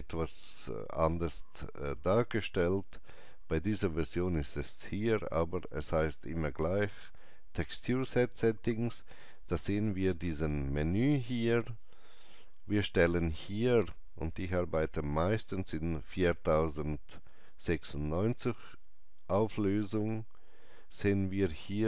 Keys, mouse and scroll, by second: 6.8 click, 14.3 click, 17.3 click.